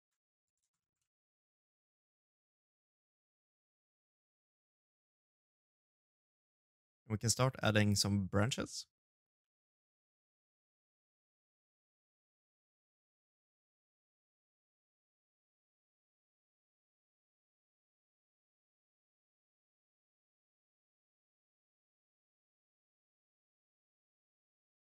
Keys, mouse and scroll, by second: 0.2 ctrl+a, 0.8 middle click, 7.4 middle click, 8.2 shift+middle click, 8.9 ctrl+a, 9.9 middle click, 10.5 e, 11.5 ctrl+a, 12.3 middle click, 12.8 scroll down 1, 13.1-13.6 scroll up 4, 13.6 scroll down 1, 13.8-14.6 scroll down 2, 13.8 space.